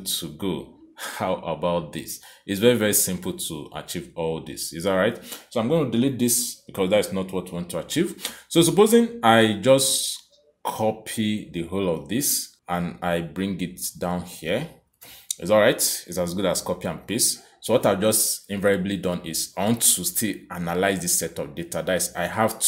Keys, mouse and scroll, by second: 2.7 click, 5.9 Delete, 7.3 click, 9.5 click, 12.5 ctrl+c, 13.5 click, 14.6 ctrl+v, 15.4 click, 16.6 click, 17.3 Escape, 19.2 click, 20.1 click, 20.9 click, 22.2 click.